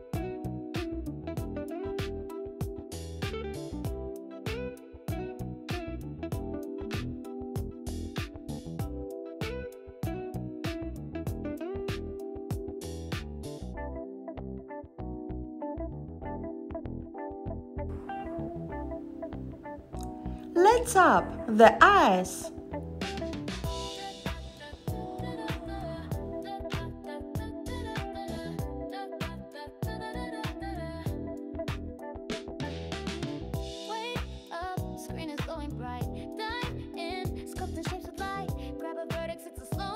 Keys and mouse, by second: 4.2 g, 7.1 click, 9.8 g, 12.2 click, 13.1 g, 15.9 click, 16.7 g, 18.4 click, 23.2 click, 25.0 click, 26.6 shift+click, 28.2 x, 29.6 shift+click, 30.7 g, 35.7 click, 37.4 click, 38.0 click, 39.1 click.